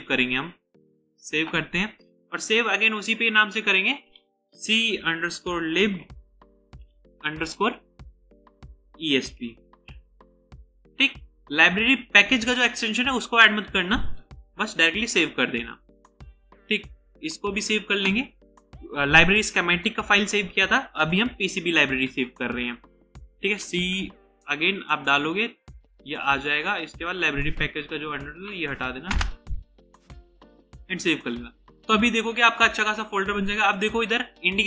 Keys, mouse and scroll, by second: 0.2 right click, 4.6-7.3 typing, 9.3-10.4 typing, 16.3 right click, 23.7 typing, 29.2 BackSpace, 32.8 right click.